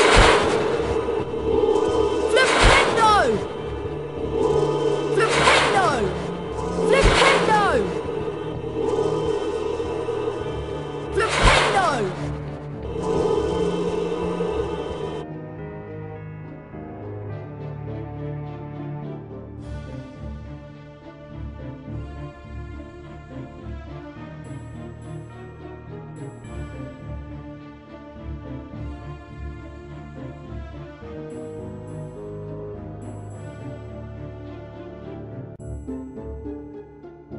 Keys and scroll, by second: 0.0-1.4 typing, 3.7-7.4 typing, 8.7-10.2 typing, 11.4-12.1 typing, 13.8-14.8 typing, 30.6 ctrl+w, 32.8 ctrl+w.